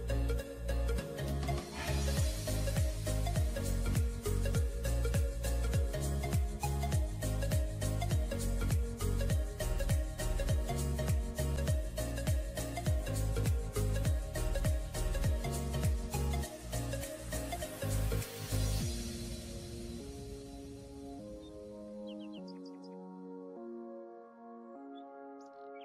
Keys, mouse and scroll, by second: 4.8 alt+scroll up 1, 5.4 alt+scroll down 1, 9.2 scroll down 1, 12.1 ctrl+click, 12.6 ctrl+e, 20.4 double click.